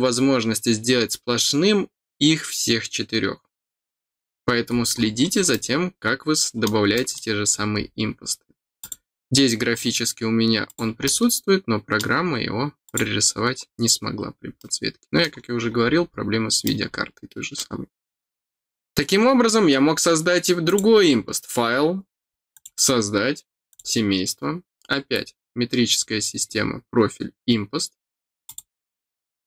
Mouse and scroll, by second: 4.4-5.1 scroll down 6, 5.5-6.6 middle drag, 6.9 middle click, 7.5 scroll up 4, 8.7-10.7 drag, 11.0 middle click, 12.8 click, 14.5 middle click, 15.5-16.3 scroll down 3, 16.6 middle click, 20.6 click, 22.5 click, 23.6 click, 24.8-26.1 scroll down 3, 26.5 middle click, 28.4 click.